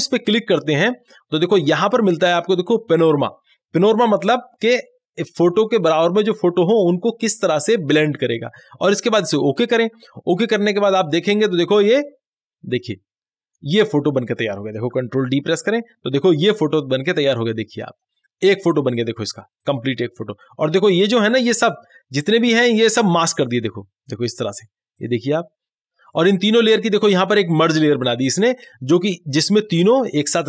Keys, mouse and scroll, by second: 9.5 click, 15.0 click, 15.6 ctrl+d, 17.4-23.6 drag, 27.3 click, 27.3 click.